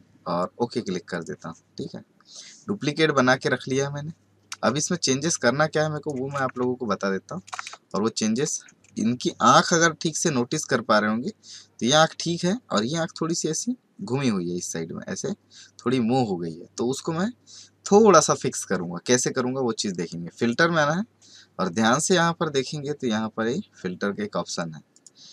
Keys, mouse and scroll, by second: 1.2 click, 4.6 space, 4.9 scroll up 2, 5.1 space, 5.7 click, 5.7-6.1 space, 6.3 space, 6.8-7.2 alt+scroll up 2, 7.7 space, 7.8 click, 8.2-25.3 space, 20.3 click, 24.9 click.